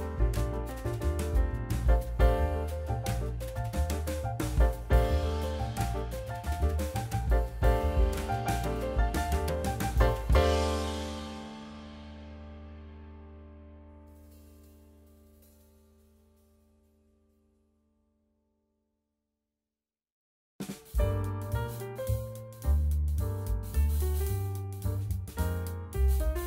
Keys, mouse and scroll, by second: 0.2 ctrl+s, 1.2 ctrl+alt+KP_0, 2.0 shift+a, 5.0 ctrl+alt+KP_0, 6.0 n, 7.0-8.5 drag, 10.7-12.1 drag, 12.9 click, 13.3-13.9 scroll down 2, 13.9 scroll down 1, 14.0-15.5 shift+middle drag, 16.4-16.9 scroll up 1, 16.9-18.3 shift+middle drag, 18.3-19.6 scroll down 1, 19.6-21.0 shift+middle drag.